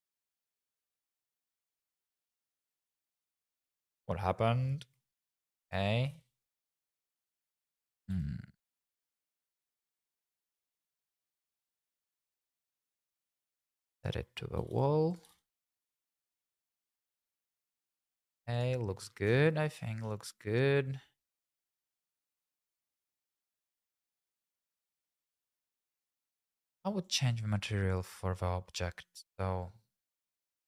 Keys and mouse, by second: 1.7 `, 6.1 g, 6.1 x, 8.0 g, 8.1 y, 12.4 click, 14.6-16.9 typing, 15.1 click, 15.5 click, 16.5 click, 17.3 click, 18.2 g, 18.5 click, 18.5 z, 19.1 shift+middle click, 27.0 click.